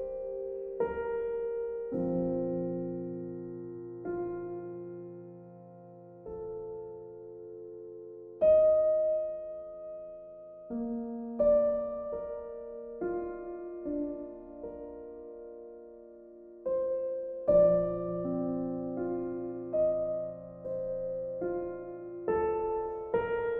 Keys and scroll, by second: 2.6 ctrl+z, 20.0 b.